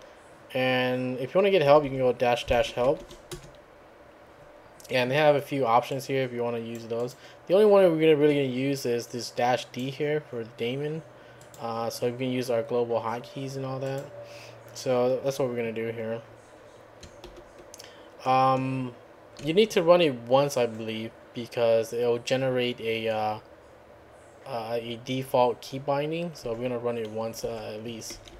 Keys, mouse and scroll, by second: 1.7-3.5 typing, 5.9-7.3 drag, 9.3 click, 11.4 click, 13.9 click, 17.3 ctrl+l, 27.4 Up, 28.1 BackSpace.